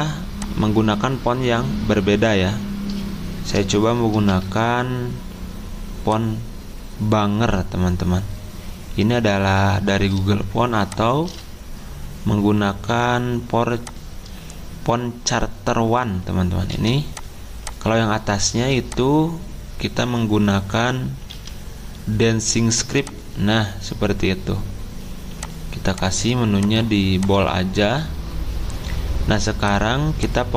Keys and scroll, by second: 4.2 b, 11.2 c, 21.3 d.